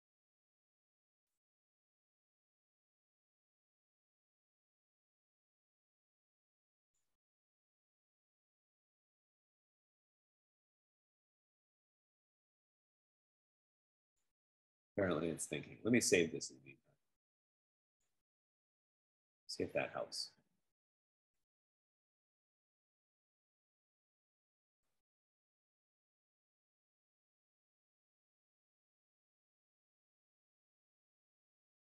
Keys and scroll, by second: 8.8 F15.